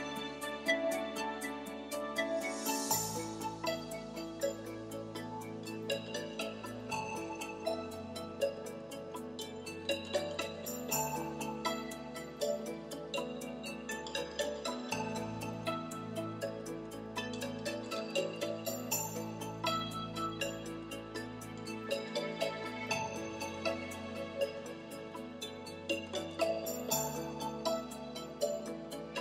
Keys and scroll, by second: 13.7 super+z.